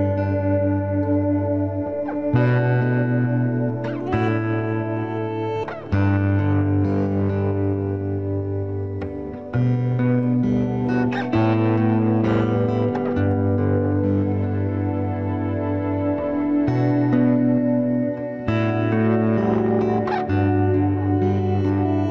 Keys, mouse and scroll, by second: 1.1 middle click, 1.8-2.9 right drag, 2.1 b, 2.4 g, 4.0 b, 4.3 g, 6.0-7.6 drag, 6.3 b, 7.1 b, 9.1 c, 10.3 middle click, 11.6 right click, 11.8-14.0 middle drag, 14.0 c, 16.1 right click, 16.2-17.4 middle drag, 17.4 click, 17.8 c, 18.1-19.4 middle drag, 19.4-20.4 drag, 20.4 c.